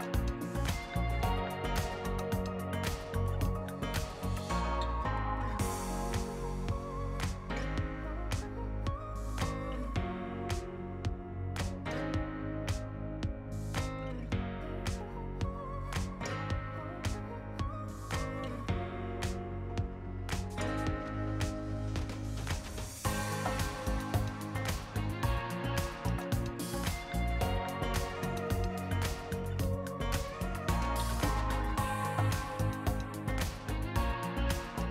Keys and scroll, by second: 26.0 r, 26.7 r, 28.1 r.